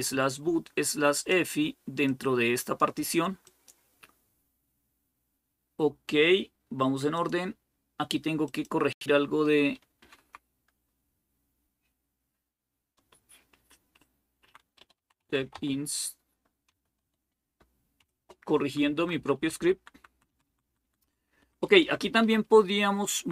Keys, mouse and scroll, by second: 6.9-9.8 drag, 9.8 BackSpace, 10.2 Left, 14.2 Right, 14.4-18.3 typing, 18.8 Down, 19.0 Down, 19.2 Down, 19.4 Down, 19.6 Down, 19.7 Down, 19.9-20.6 typing, 20.6 Down, 20.8 Down, 21.2 Up, 21.4 Up, 21.6 Up, 21.8 Up, 22.1 Up, 22.9 Up.